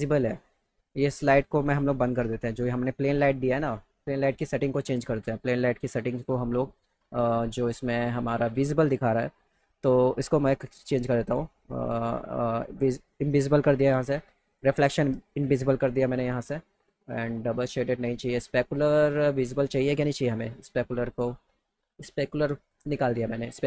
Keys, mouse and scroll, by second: 0.5 click, 2.0 click, 3.1 click, 4.2 click, 6.0 click, 10.1 click, 12.5 click, 14.4 click, 20.5 click.